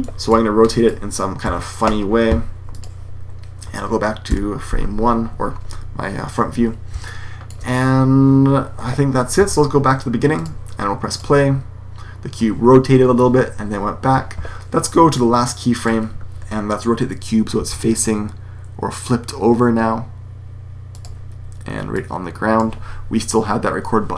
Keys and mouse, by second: 0.7-1.0 middle drag, 1.3-2.1 middle drag, 1.3 r, 4.2 KP_1, 6.9-7.8 middle drag, 10.2-11.1 drag, 13.9 Escape, 17.5 r.